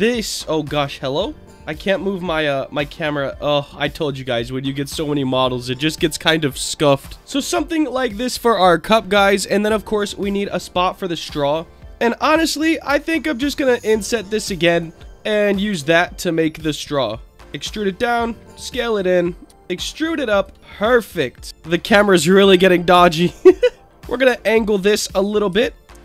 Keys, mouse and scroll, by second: 0.8 shift+middle click, 1.3 shift+middle click, 2.3 shift+middle click, 2.7 shift+middle click, 3.2 shift+middle click, 3.7 shift+middle click, 4.1 shift+middle click, 4.6 shift+middle click, 5.1 shift+middle click, 5.5 shift+middle click, 6.0 shift+middle click, 6.5 shift+middle click, 7.0 shift+middle click, 7.1 Tab, 7.1 scroll up 3, 7.7-8.9 scroll down 5, 8.9-10.1 scroll up 7, 10.1-10.5 scroll down 2, 10.5 click, 10.8-11.7 scroll down 3, 11.1 Tab, 14.7 click, 15.7 s, 17.3 scroll down 2, 17.3 e, 17.4 click, 18.0 s, 18.5 click, 19.4 e, 20.3 click, 20.6 alt+middle click, 20.9-21.7 scroll down 7, 21.5 shift+middle click, 21.5 scroll up 1, 23.9 click, 25.5 r.